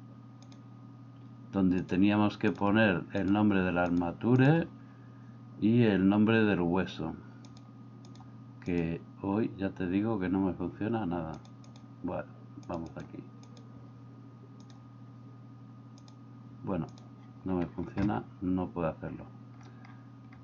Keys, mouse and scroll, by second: 1.9-4.5 drag, 7.5-8.8 drag, 11.5-13.1 drag, 13.6 click, 16.1 click.